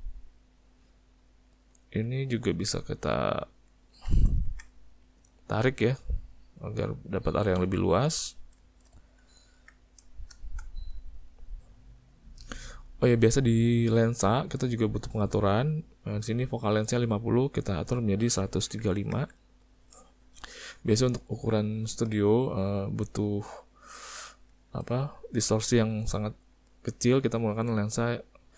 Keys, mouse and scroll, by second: 0.6 middle click, 1.7 click, 2.2 ctrl+middle click, 2.8 middle click, 3.3 ctrl+middle click, 3.4 ctrl+middle click, 3.5 ctrl+middle click, 3.8 ctrl+middle click, 4.5 Tab, 5.0 click, 6.1 click, 8.1 Tab, 8.6 shift+middle click, 8.9 middle click, 9.3 ctrl+middle click, 9.8 middle click, 10.1 shift+middle click, 10.6 shift+middle click, 11.0 middle click, 11.5 middle click, 12.1 middle click, 13.8 click, 17.5 click, 21.1 shift+middle click, 22.4 ctrl+middle click, 23.4 ctrl+middle click, 23.9 shift+middle click, 24.6 ctrl+middle click, 25.0 shift+middle click, 26.1 ctrl+middle click.